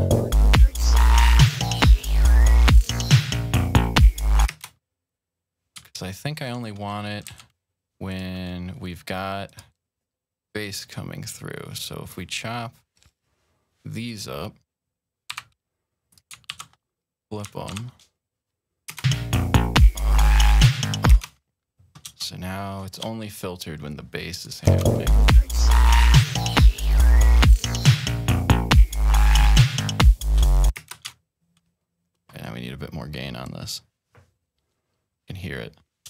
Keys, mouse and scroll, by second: 4.5 space, 6.0 ctrl+scroll up 1, 7.1 c, 7.9 click, 9.3 click, 9.4 typing, 12.7 click, 13.9 click, 15.1 g, 15.9 alt+click, 16.3 alt+1, 17.5 alt+1, 18.1-19.2 drag, 18.8 space, 21.1 space, 22.1-22.9 shift+scroll up 2, 24.2 click, 24.5 space, 29.8-30.5 shift+scroll down 3, 30.7 space, 31.2-31.7 ctrl+scroll down 2, 33.3-34.5 drag, 34.5 click.